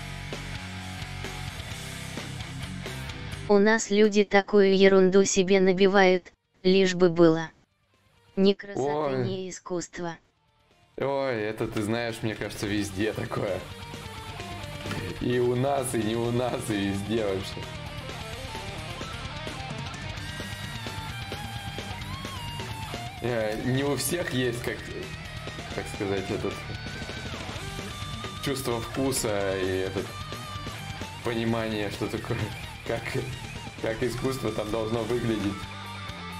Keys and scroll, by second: 2.1-2.8 typing, 19.5 ctrl+z, 19.5 y, 20.1 x.